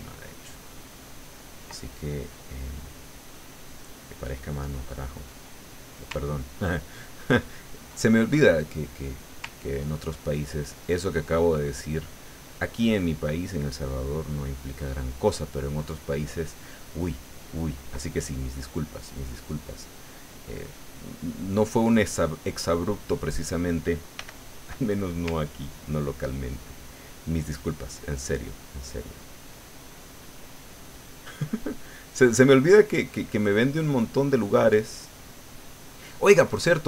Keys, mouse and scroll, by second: 1.9 ctrl+middle click, 2.8-5.8 middle drag, 6.3-8.0 ctrl+drag, 8.1 ctrl+middle click, 9.7 ctrl+click, 10.4-13.3 ctrl+drag, 13.5-18.0 ctrl+drag, 18.0 ctrl+middle click, 19.1 middle click, 20.0-23.1 middle drag, 24.2 f, 24.8 click, 25.5 ctrl+click, 26.0-32.2 ctrl+drag, 32.3-36.3 ctrl+drag, 36.7-36.8 ctrl+drag.